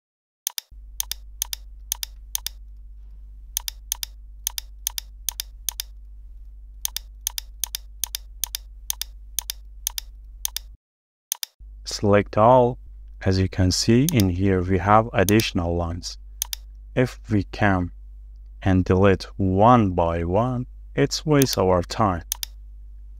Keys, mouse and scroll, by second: 1.5 double click, 2.7 shift+middle click, 3.3-4.0 shift+scroll up 1, 4.0 double click, 6.0 shift+middle click, 6.6-7.3 scroll up 1, 7.3 double click, 10.8 space, 12.9 ctrl+z, 17.4-17.7 scroll up 1, 17.7 shift+middle click, 20.9 e, 22.9 scroll down 1.